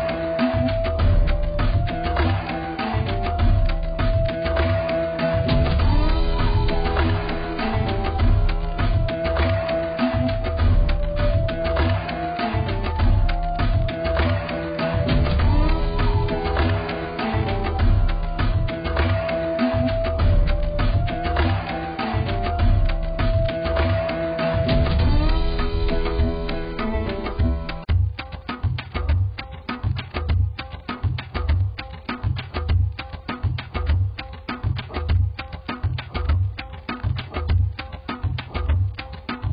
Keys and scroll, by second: 11.8 x.